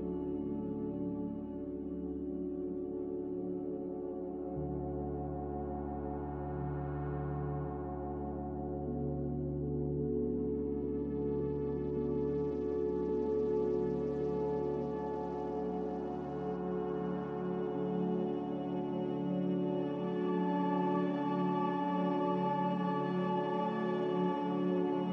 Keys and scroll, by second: 1.2 z, 4.5-6.5 typing, 18.1 v, 24.4 z.